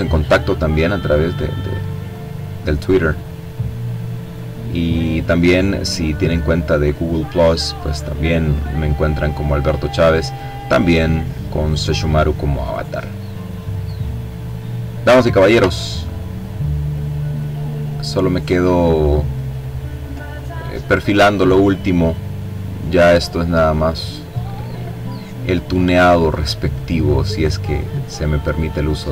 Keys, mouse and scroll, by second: 0.7-2.0 drag, 2.5-4.6 drag, 4.9-7.8 drag, 8.1-9.6 drag, 9.8 click, 11.7-13.0 drag, 13.0-14.0 ctrl+scroll down 2, 14.2 ctrl+click, 14.9-15.5 ctrl+scroll up 1, 15.6-16.0 scroll down 1, 16.0 click, 16.8-17.6 scroll up 1, 17.6 click, 18.6-19.8 drag, 20.0-22.0 drag, 22.4 click, 23.6 click, 24.6-26.2 drag, 26.5-29.1 drag.